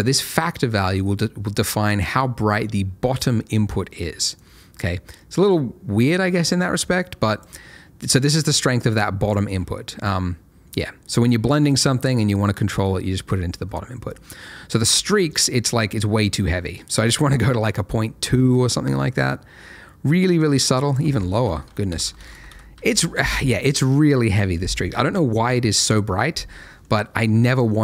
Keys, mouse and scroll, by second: 4.3 click, 8.3 click, 15.3 click, 20.8 click, 21.6 Right, 21.9-22.7 typing, 22.8 Return, 26.4 middle click, 27.1-27.5 scroll down 1, 27.5 middle click.